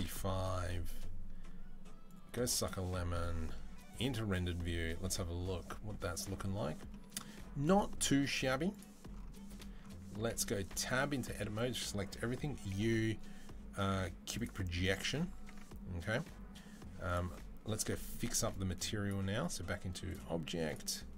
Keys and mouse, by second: 4.5-8.4 middle drag, 9.0-16.9 middle drag, 11.0 Tab, 11.3 a, 12.5 u, 15.6 Tab, 16.9-21.1 drag.